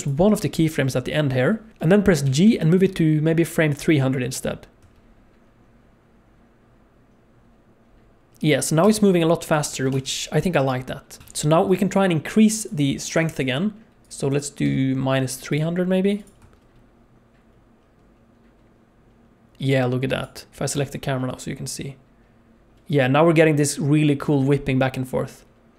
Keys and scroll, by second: 2.2 g, 4.8 space, 8.8 space, 9.9 space, 11.2 space, 16.4 space, 20.5 shift+space, 23.4 space.